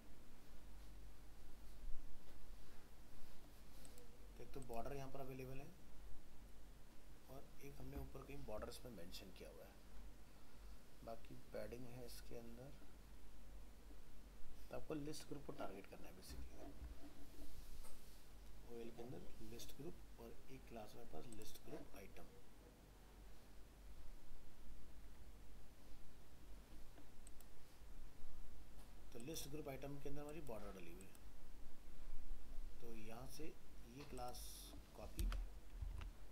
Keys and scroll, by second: 35.2 ctrl+c, 35.9 alt+Tab.